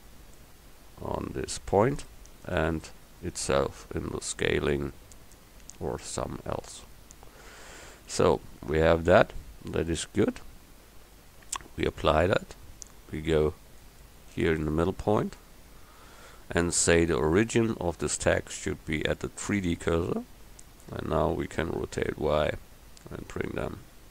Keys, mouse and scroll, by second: 3.6 s, 12.0-17.7 drag, 18.2-20.2 drag, 21.6 r.